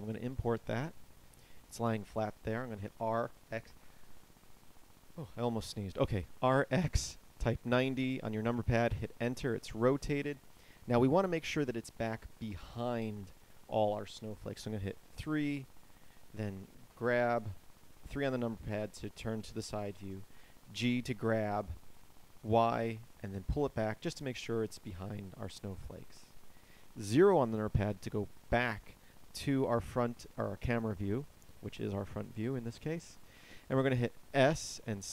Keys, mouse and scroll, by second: 2.7 r, 14.5 KP_3, 16.7 g, 26.9 KP_0, 34.3 s.